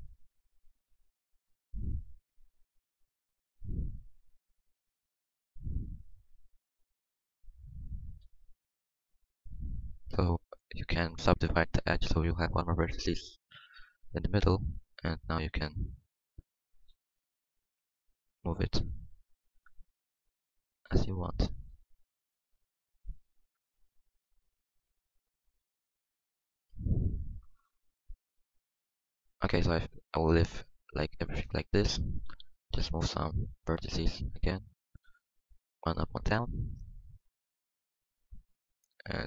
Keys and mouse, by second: 0.3-1.6 drag, 1.6-3.1 middle drag, 4.6 ctrl+z, 4.8 ctrl+z, 5.1 ctrl+z, 5.3 ctrl+z, 8.2 w, 13.0-14.3 middle drag, 14.3 g, 16.2-18.4 drag, 16.2 g, 19.4 g, 21.7 ctrl+z, 23.9-24.9 drag, 25.2 ctrl+z, 25.6 ctrl+z, 25.8 ctrl+z, 26.1 ctrl+z, 26.8 ctrl+z, 29.1-30.2 middle drag, 29.4 Tab, 30.9 Tab, 32.3 g, 33.5 g, 35.0 g, 36.4 g, 37.4 g.